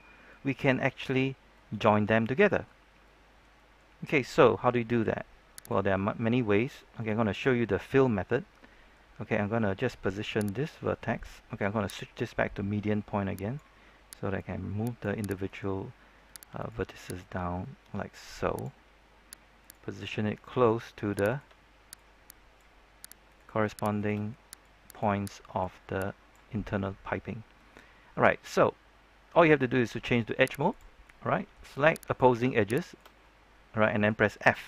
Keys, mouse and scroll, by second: 2.8 scroll down 1, 3.0 middle click, 4.0-5.6 scroll up 1, 5.6 right click, 6.7-9.7 middle drag, 10.5 right click, 12.1-15.4 drag, 15.4 right click, 16.5 shift+right click, 17.1-18.8 drag, 19.6 right click, 20.0-21.1 scroll up 1, 21.2 shift+right click, 21.9 click, 23.2 right click, 23.9 shift+right click, 24.6-26.6 drag, 26.6-27.2 scroll up 1, 27.2-27.7 scroll down 1, 27.7-29.8 middle drag, 30.0 ctrl+Tab, 30.6 click, 31.0-32.0 middle drag, 32.0 right click, 32.8 shift+right click, 33.2 middle click.